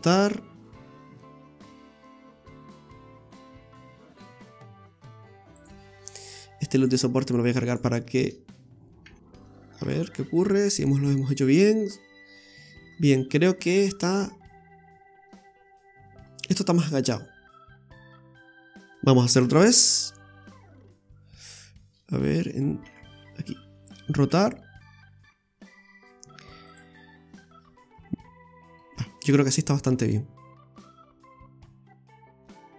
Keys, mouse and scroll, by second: 6.8 click, 7.4 right click, 7.7 alt+shift+right click, 7.9 right click, 9.0 x, 9.8 Tab, 10.3-11.1 scroll up 2, 11.3 click, 11.8 scroll up 2, 11.9 middle click, 12.9 scroll down 5, 13.4 middle click, 17.4-17.8 scroll up 3, 18.0 middle click, 18.5-18.9 scroll up 2, 19.3 Tab, 19.8-20.2 scroll up 2, 20.8 ctrl+z, 21.1 middle click, 22.4 KP_1, 22.8 KP_3, 24.3 r, 27.1 scroll down 2, 27.3 middle click, 28.9-29.5 scroll down 2, 29.3 middle click, 30.6 click, 31.1-31.6 scroll up 2, 31.6 right click, 32.5 Tab.